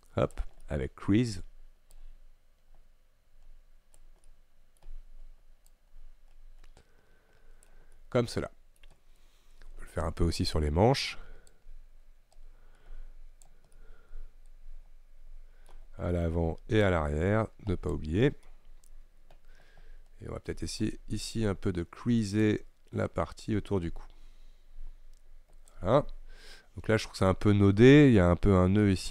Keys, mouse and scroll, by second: 0.7 middle click, 1.4-2.0 scroll up 1, 2.0-4.3 drag, 4.3 middle click, 4.9-5.8 scroll up 1, 5.8-7.9 drag, 7.9 scroll down 1, 8.0 middle click, 9.0-9.5 scroll down 4, 9.5-11.7 scroll up 2, 11.7-13.8 drag, 13.8-17.1 middle drag, 17.1-18.6 drag, 18.6-20.9 middle drag, 20.9-22.5 scroll up 1, 22.5-25.8 drag, 26.1-28.9 middle drag, 28.9-29.1 scroll up 1.